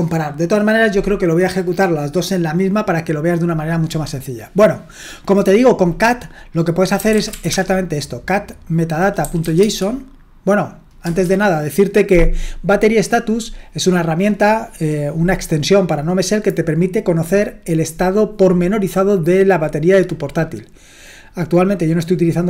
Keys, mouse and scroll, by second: 6.7-7.8 typing, 9.0-9.9 typing, 11.1 Return.